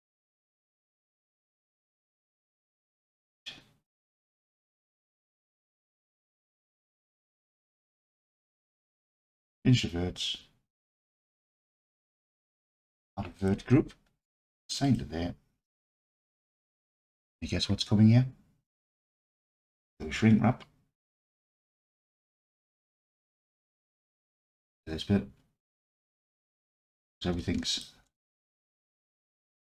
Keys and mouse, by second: 0.6-2.7 alt+drag, 6.0 1, 6.5-7.9 alt+drag, 8.2-9.0 drag, 13.5-21.2 drag, 27.4-27.8 alt+drag, 28.0 alt+z, 28.2-28.9 alt+drag.